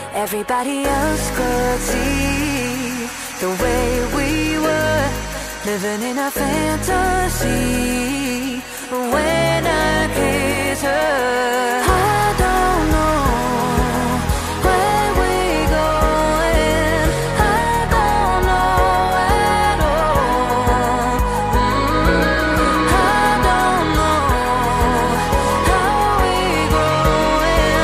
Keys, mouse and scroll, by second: 0.8 shift+a, 1.9 s, 2.8 g, 4.4-8.1 ctrl+alt+shift+drag, 5.6 g, 7.2 a, 7.7 Tab, 10.8-12.2 typing, 11.7 Tab, 12.6 alt+shift+click, 13.0 alt+click, 14.9-16.5 drag, 14.9-16.5 middle drag, 14.9-16.5 right drag, 16.5 KP_1, 17.0 r, 17.8-19.4 alt+shift+drag, 17.8 z, 18.3 r, 19.4-23.9 alt+middle drag, 20.1 KP_7, 20.4 z, 21.4 shift+d, 22.2 r, 23.9 click, 24.0 r, 24.8-27.8 alt+shift+middle drag, 25.3 shift+d, 26.4 r, 27.7 g.